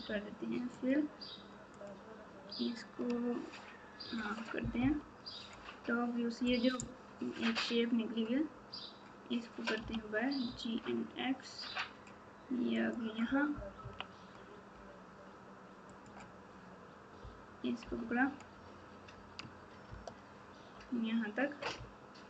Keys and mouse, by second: 0.8-3.0 drag, 4.8 KP_7, 9.8 g, 13.8 KP_3, 15.8 click, 17.8 KP_7, 19.8 ctrl+KP_8, 20.3 ctrl+KP_8, 21.7 ctrl+KP_6, 22.2 ctrl+KP_6.